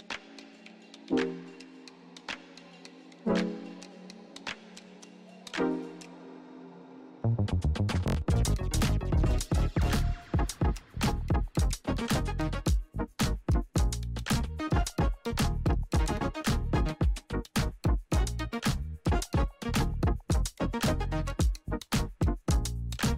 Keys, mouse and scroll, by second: 0.9 shift+=, 1.9 5, 3.3-5.3 typing, 6.0 Return, 7.7-10.9 drag, 12.8 ctrl+d, 18.6 ctrl+d, 20.4 click.